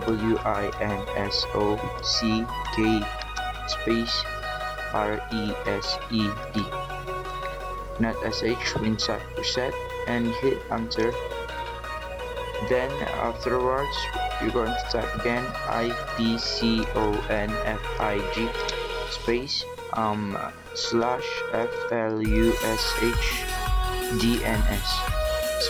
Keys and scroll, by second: 0.0-2.8 typing, 3.8-6.5 typing, 15.2-19.1 typing, 20.8-25.4 typing.